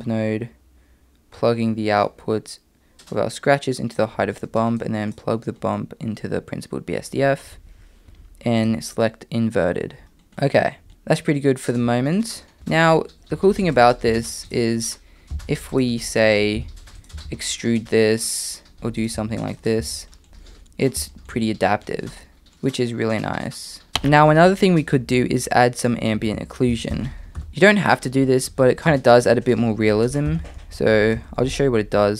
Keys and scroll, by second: 12.6 Tab, 14.1 e, 15.3 3, 16.6 i, 17.1 e, 18.7 s, 19.1 e, 19.8 Tab, 26.3 shift+a, 28.9 shift+a, 31.2 BackSpace.